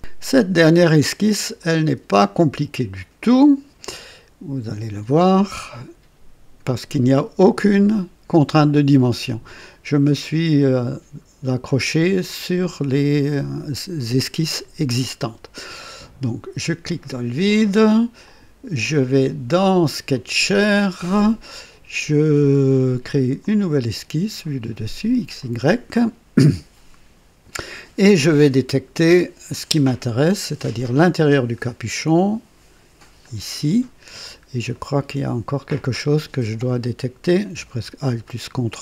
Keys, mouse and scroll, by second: 1.5 click, 1.9 space, 4.9 click, 6.1 scroll down 2, 14.4 click, 16.8 click, 18.2 click, 20.1 click, 23.3 click, 25.3 click, 28.0 click, 30.6 click, 31.6-31.9 scroll up 1, 33.1 click, 34.0-34.4 scroll up 1, 34.7 right click, 38.2 ctrl+alt+click.